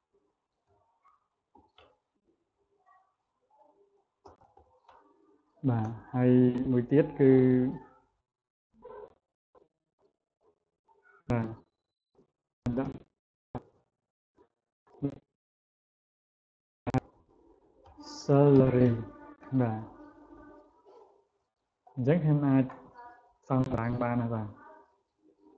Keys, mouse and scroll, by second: 0.5 Caps_Lock, 1.6 e, 4.3 a, 4.7 e, 12.4-13.8 typing, 16.8 shift+s, 17.7 a, 18.4 a, 18.7 r, 24.3-25.5 drag.